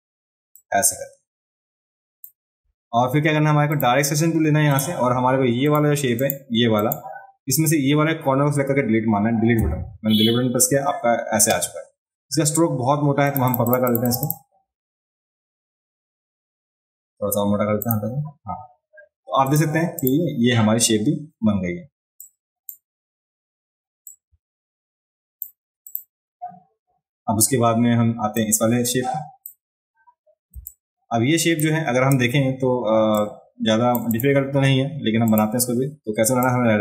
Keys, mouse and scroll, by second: 0.6-2.2 drag, 3.7 click, 4.7 click, 5.7 click, 6.2 click, 6.8 click, 13.3 click, 13.4 click, 13.4 right click, 13.6 click, 13.6 right click, 13.9 click, 13.9 right click, 14.1 click, 14.1 right click, 14.2 click, 14.2 right click, 17.8 click, 17.8 right click, 19.4 click, 20.0 click, 22.2 click, 24.0-25.4 drag, 25.9 click, 28.4-29.4 drag, 30.5 space, 30.6 click, 33.2 shift+click, 34.1 click, 35.3 click, 36.4-36.8 drag.